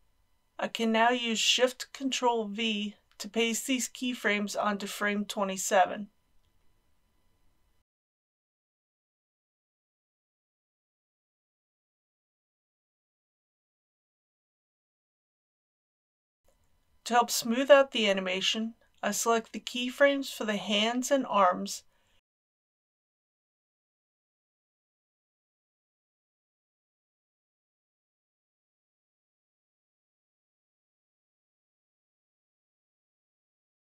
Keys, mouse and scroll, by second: 0.1 click, 1.2 ctrl+c, 3.3 click, 5.5 Right, 6.8 ctrl+shift+v, 9.6 click, 10.7 middle click, 11.9 shift+middle click, 13.8-18.7 drag, 25.7 a, 27.3 scroll down 1, 27.5-28.0 scroll up 1, 28.0-33.8 drag.